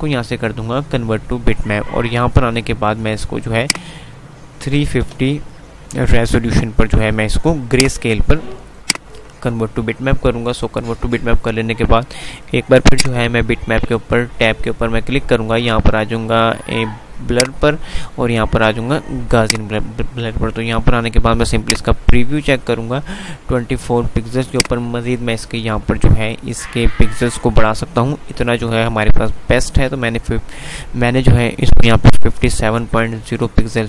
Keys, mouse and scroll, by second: 3.9 click, 8.9 click, 13.0 click, 17.5 click, 24.8 click.